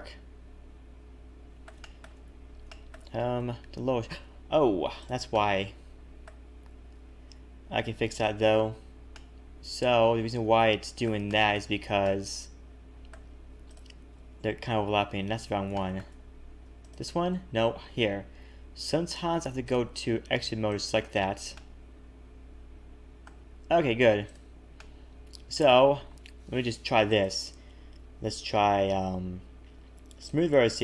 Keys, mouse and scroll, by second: 1.8 shift+middle click, 2.2-2.6 scroll up 6, 2.6 shift+middle click, 3.1-3.5 scroll up 2, 3.4 Tab, 5.0 click, 5.3 middle click, 8.4 click, 9.1 middle click, 11.2 shift+middle click, 11.7-12.1 scroll up 2, 12.0 middle click, 13.6 shift+click, 15.3 ctrl+z, 15.7 shift+middle click, 16.1-16.6 scroll up 3, 16.8 shift+click, 18.0 ctrl+z, 19.6 click, 20.6 shift+click, 21.2-21.5 scroll down 3, 21.5 middle click, 24.2 click, 24.8 middle click, 27.1 right click.